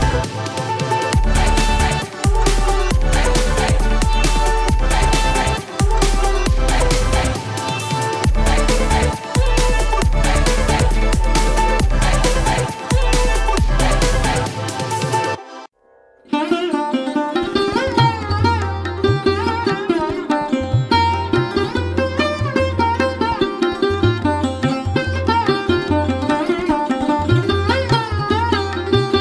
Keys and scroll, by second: 4.5 space, 10.0 space, 24.0 space.